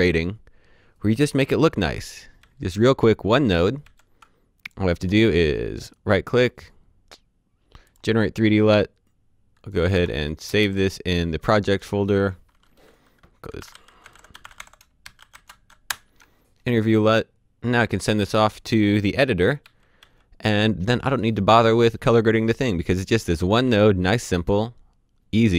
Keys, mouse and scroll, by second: 6.0 right click, 7.8 click, 9.7 click, 9.9 ctrl+v, 10.4 KP_Enter, 11.6 click, 13.3-15.8 typing, 15.8 Return, 18.2 click, 19.6-19.9 typing, 23.2-23.6 typing.